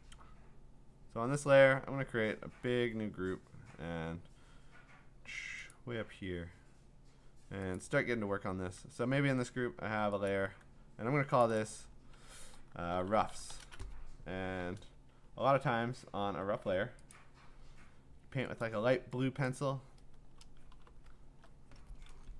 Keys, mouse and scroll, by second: 0.7-3.8 scroll, 3.8-4.6 scroll, 5.7 click, 7.8 click, 10.3 click, 11.4 click, 11.6 click, 12.7-14.0 typing, 17.3 click, 18.6 click, 19.5 click, 20.2 Return, 20.7 b, 21.2 alt+scroll.